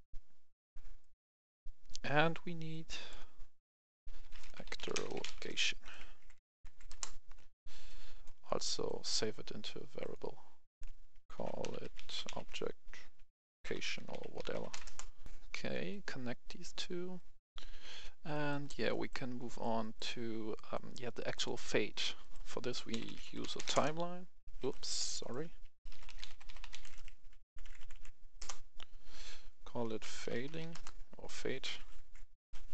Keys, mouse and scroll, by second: 4.1-5.3 typing, 6.1 Down, 6.2 Down, 6.4 Down, 6.5 Down, 7.7 click, 11.2-12.1 typing, 13.4-14.6 typing, 14.7 Return, 15.2 click, 15.2 F10, 15.9 click, 18.3-20.5 right drag, 22.7-23.6 typing, 23.6 right click, 23.7 Return, 24.8 Delete, 24.8 click, 25.1 right click, 25.8-27.6 typing, 28.4 Return, 30.2-30.6 typing, 30.7 Return, 31.5 F2, 32.0 Left, 32.6 Right.